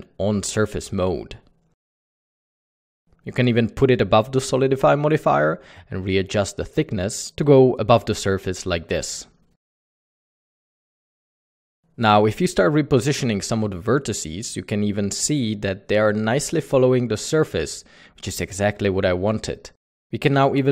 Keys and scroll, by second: 4.5 alt+a, 12.7 alt+a, 15.4-16.1 typing, 16.7 Escape, 18.2-18.9 typing, 20.0 Tab.